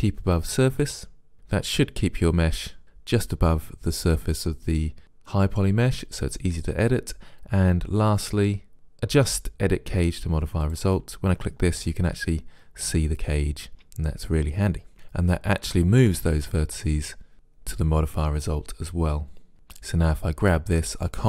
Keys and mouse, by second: 0.9 click, 10.7-12.6 drag, 19.5 g.